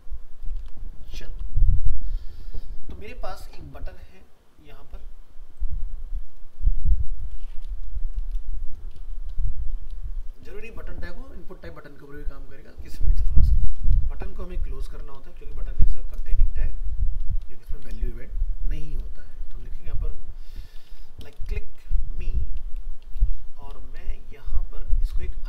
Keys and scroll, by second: 0.6 ctrl+v.